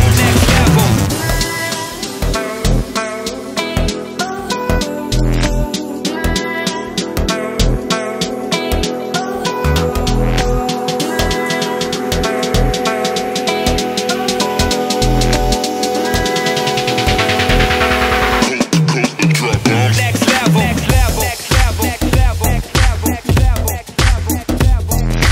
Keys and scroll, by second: 0.0 Delete, 13.6 ctrl+d.